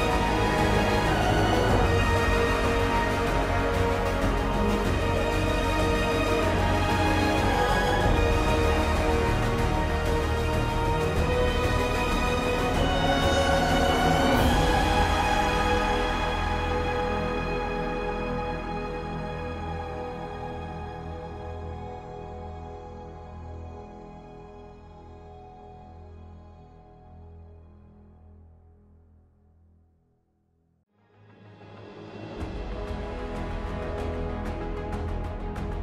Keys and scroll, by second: 4.5 ctrl+t, 22.5 ctrl+t, 33.0 ctrl+z.